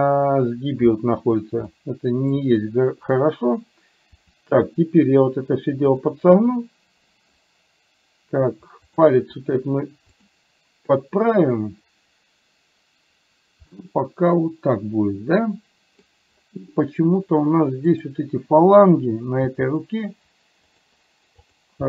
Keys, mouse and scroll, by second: 1.7 middle click, 4.2 r, 6.5 middle click, 9.3 r, 13.8-16.1 middle drag, 18.0 click, 19.5 g, 21.5 click.